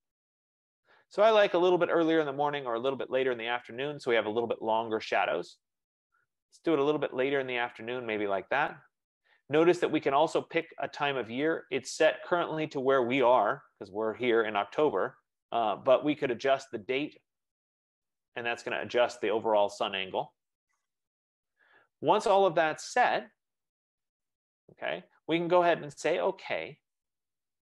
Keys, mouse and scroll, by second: 7.9-14.0 drag, 19.1 click, 25.2 click, 27.4 click.